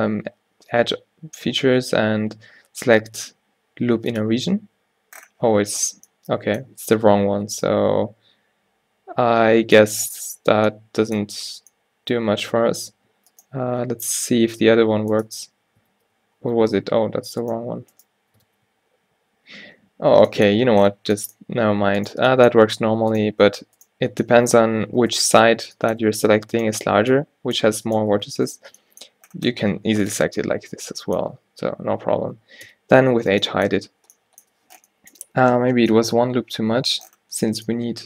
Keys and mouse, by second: 5.3-8.4 middle drag, 11.6 a, 13.4-15.1 drag, 14.3 ctrl+e, 16.0 ctrl+e, 17.5-19.8 drag, 18.5 ctrl+e, 22.1-32.0 drag, 32.0 middle click, 32.8 h, 36.7 ctrl+z.